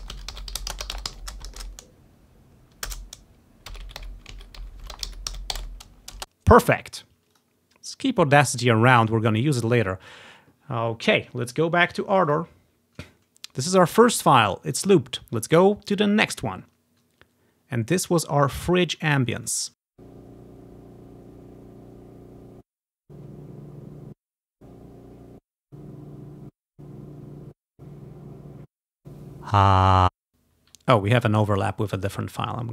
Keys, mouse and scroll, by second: 6.2 space, 7.5-8.8 drag, 10.2 click, 12.4 click, 14.1 click, 15.1 ctrl+scroll down 1, 16.0 click, 16.9 scroll up 2, 18.1 click, 18.9 scroll up 2, 19.5 click, 19.9 space, 20.0-21.4 drag, 22.5 space, 22.8-24.0 drag, 23.0 space, 24.1-29.0 typing, 24.4 click, 24.9 ctrl+scroll down 1, 25.5 click, 25.9-28.2 ctrl+drag, 26.9-27.6 scroll down 2, 27.6 ctrl+scroll up 1, 27.6-28.1 scroll down 1, 28.1 ctrl+scroll up 1, 28.8 click, 30.0 space, 30.9 scroll down 1, 31.7 click, 32.0 scroll up 1.